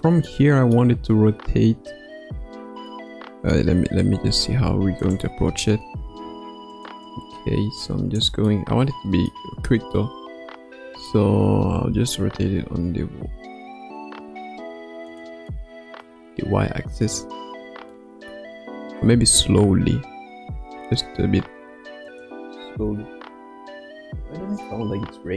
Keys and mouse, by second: 0.3 middle click, 2.9 middle click, 5.0 click, 5.4 space, 6.0 space, 6.7 click, 7.1 click, 8.5-9.3 middle drag, 9.9-11.1 middle drag, 11.7 r, 15.5-16.1 middle drag, 18.3 middle click, 19.3 KP_1, 20.7 r.